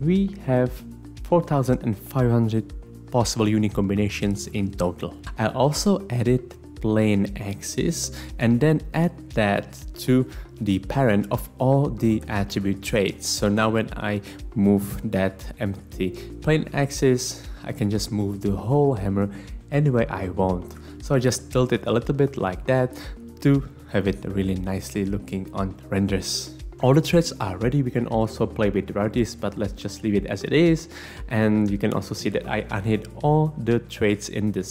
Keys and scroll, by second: 13.5 r, 20.8 Escape.